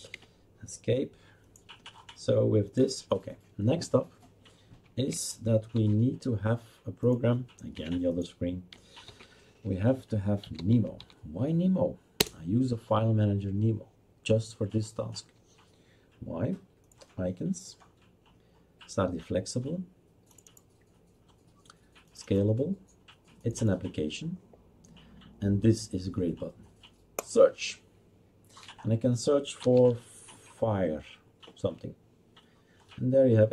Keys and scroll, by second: 0.1 Escape, 5.7 shift+super+d, 7.7 Escape, 9.0 shift+super+d, 10.2-11.5 typing, 12.2 Return, 29.4-30.4 typing.